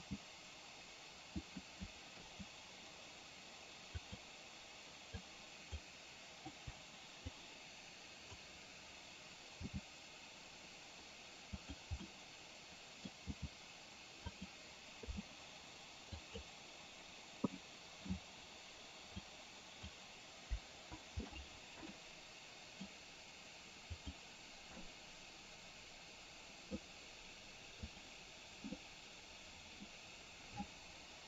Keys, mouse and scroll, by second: 0.1 g, 2.3 i, 4.2 click, 5.2-5.9 drag, 6.6 Delete, 7.4-8.6 drag, 11.8 g, 12.2 scroll up 1, 12.3 middle click, 13.2 scroll down 1, 13.4 g, 15.2 i, 16.4 click, 17.7-18.2 middle drag, 19.3-19.9 drag, 20.8 Delete, 22.1-22.8 middle drag, 24.1 click, 24.9-26.8 middle drag, 28.1 click, 28.8-29.9 middle drag.